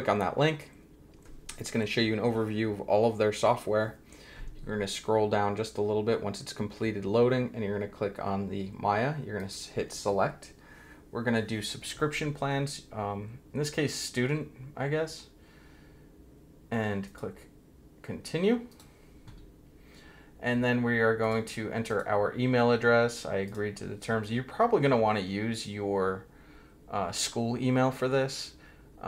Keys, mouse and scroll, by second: 9.4 click, 17.0 click, 18.7 click, 21.2 click, 21.9 click, 22.8-23.4 scroll down 1, 23.4 click, 28.6-29.0 scroll down 1.